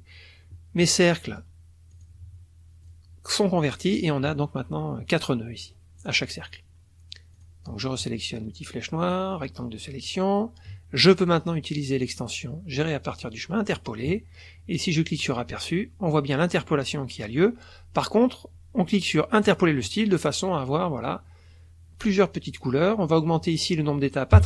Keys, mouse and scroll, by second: 0.8 click, 1.9 click, 2.8 click, 3.3 click, 6.0 click, 7.3 click, 9.1 click, 11.3 click, 13.7 click, 15.2 click, 19.4 click, 23.1 click, 24.3 KP_3.